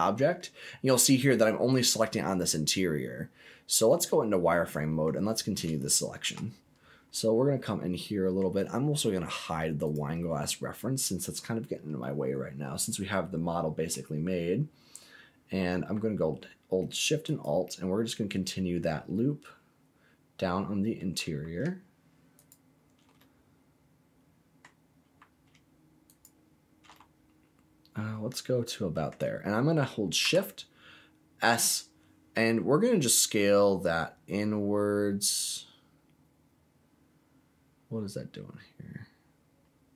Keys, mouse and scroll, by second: 0.6-1.0 scroll down 2, 1.0 middle click, 3.9 click, 4.5 middle click, 5.3 scroll up 1, 5.8 shift+middle click, 6.4-7.1 scroll up 5, 7.1-8.3 middle drag, 9.8 click, 10.4 middle click, 12.0-13.9 middle drag, 17.2 alt+shift+click, 18.1-18.6 scroll down 4, 19.1-21.1 middle drag, 22.3 alt+shift+click, 23.1-24.6 middle drag, 26.0 alt+shift+click, 26.9-29.0 middle drag, 30.2 s.